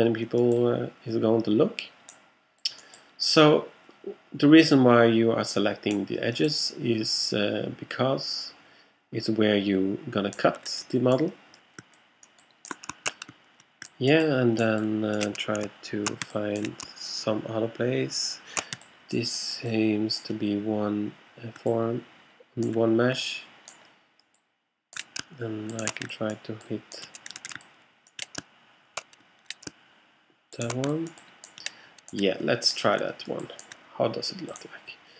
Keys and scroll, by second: 27.4 alt+super+z, 28.4 alt+shift+super+z.